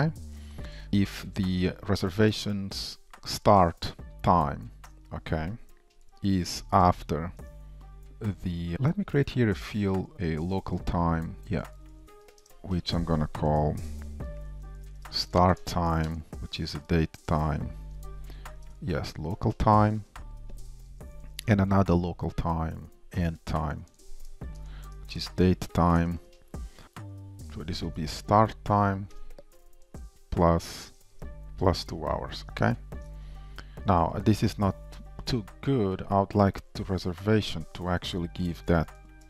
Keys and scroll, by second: 5.0 Return, 17.3 Return, 19.5 shift+super+Return, 20.1 shift+super+Return, 22.6 Return, 26.1 Return, 26.8 ctrl+shift+Left, 29.3 Return, 31.3 Return, 38.1 super+x.